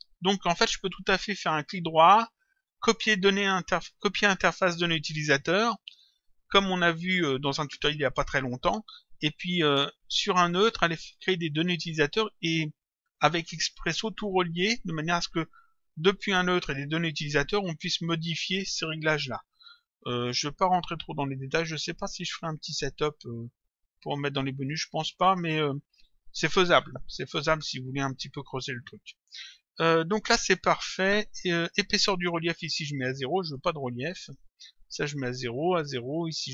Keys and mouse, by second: 1.5 right click, 5.9 click, 10.5 click, 12.8 click, 20.4 click, 28.8 click, 33.1 click.